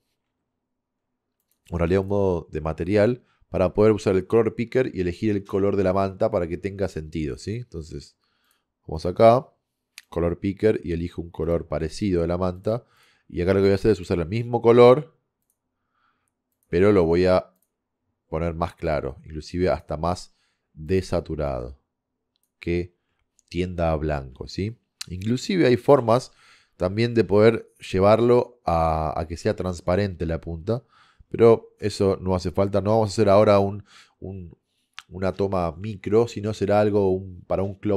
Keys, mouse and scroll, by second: 8.5-10.4 drag, 23.7-25.0 middle drag, 32.4-34.4 middle drag.